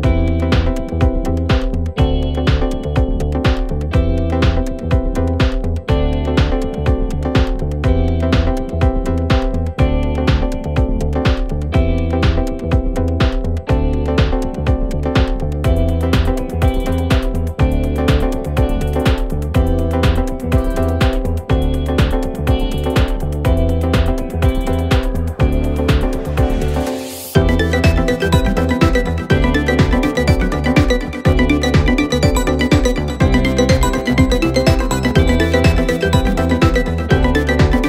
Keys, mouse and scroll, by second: 2.0 alt+scroll down 1, 3.0 alt+scroll up 1, 3.7 space, 3.9-4.5 click, 4.3 space, 4.7 click, 5.3 right click, 8.7 click, 12.2 shift+click, 32.5-35.0 drag.